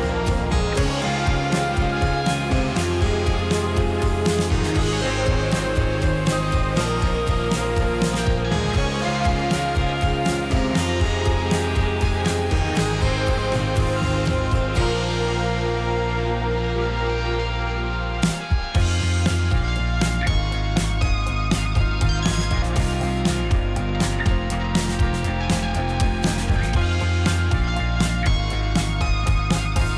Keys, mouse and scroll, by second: 2.3 drag, 2.4-5.4 middle drag, 5.9 click, 6.3 drag, 6.8-7.1 scroll down 2, 7.1-9.0 middle drag, 9.0 click, 10.2 click, 13.7 g, 14.9 s, 15.5-16.0 scroll up 4, 16.0-17.0 shift+middle drag, 17.5 s, 18.1-18.8 middle drag, 18.8 `, 20.2-21.3 drag, 21.4 g, 22.5 click, 22.8-23.3 middle drag, 23.3 click, 23.8 g, 25.5 s, 26.4 click, 26.6-27.5 middle drag, 28.1 click, 28.3-29.3 middle drag, 29.8 Tab.